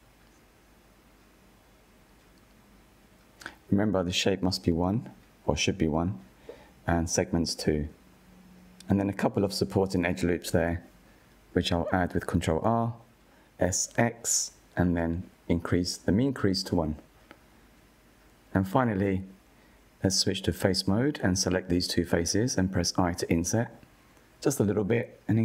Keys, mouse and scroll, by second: 4.6-5.6 middle drag, 5.6-8.5 scroll down 1, 8.5-9.2 drag, 9.2-11.5 middle drag, 11.5 ctrl+r, 14.1 s, 18.5-19.5 drag, 19.5-20.3 middle drag, 20.3 scroll down 2, 20.9-22.6 middle drag, 22.6-23.2 drag, 23.5 middle click, 24.3 shift+click.